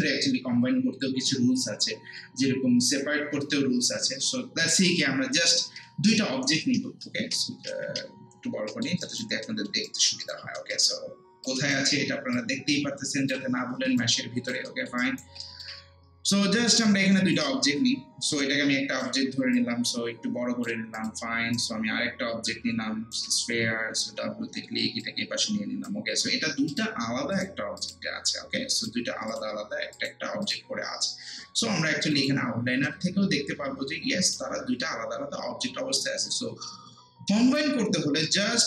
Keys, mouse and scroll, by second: 7.7 ctrl+space, 8.1 scroll down 1, 8.5 scroll up 1, 8.7 alt+middle click, 9.9 alt+right click, 10.6 alt+middle click, 11.5-14.0 drag, 14.0 alt+right click, 14.7 alt+middle click, 15.0 alt+right click, 15.4 alt+middle click, 16.3-18.4 shift+right drag, 18.4 click, 19.2 r, 19.5-21.4 drag, 21.5-23.9 shift+right drag, 23.9 w, 25.0-37.7 drag, 37.7 scroll down 1, 38.1 scroll up 1, 38.2 alt+middle click.